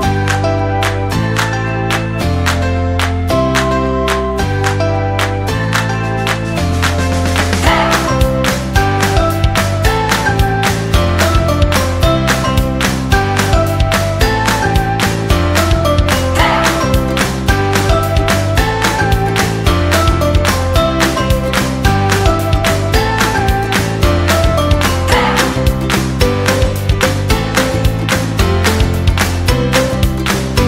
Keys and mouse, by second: 2.6 alt+z, 3.1 shift+middle click, 6.3 right click, 6.9 shift+right click, 7.3 shift+right click, 7.7 shift+right click, 8.1 middle click, 8.9 s, 10.9 KP_3, 11.7 e, 12.8 g, 14.3 shift+middle click, 14.9 middle click, 19.3 middle click, 20.3 right click, 21.3 shift+right click, 21.7 KP_3, 22.8 g, 24.3 Tab, 24.5-25.9 middle drag, 27.5 middle click, 28.3 Tab, 28.4 middle click, 29.8 right click, 30.1 g.